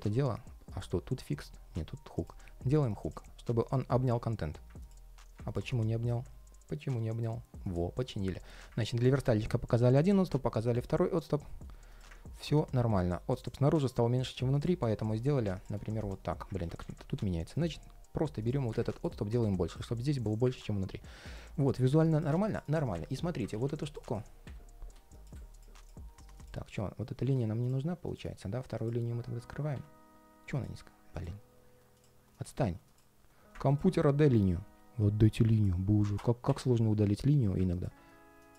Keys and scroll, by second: 16.3 super+z.